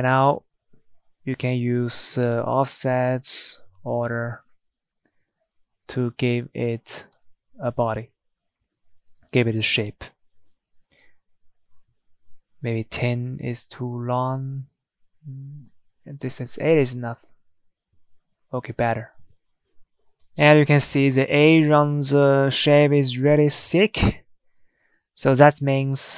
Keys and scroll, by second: 5.5 typing, 6.2 Return, 8.9 Tab, 11.0 Tab, 11.8 ctrl+z, 15.3 8, 19.9 Tab, 22.9 Tab, 23.1 Tab, 23.8 Tab.